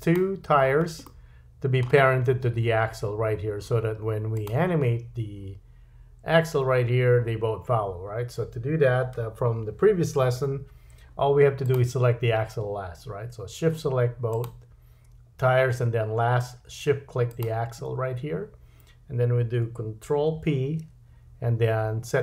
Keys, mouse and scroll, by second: 0.0 click, 1.0-4.3 middle drag, 4.3 click, 4.5-11.6 middle drag, 11.6 click, 14.3 shift+click, 17.3 shift+click, 20.3 ctrl+p.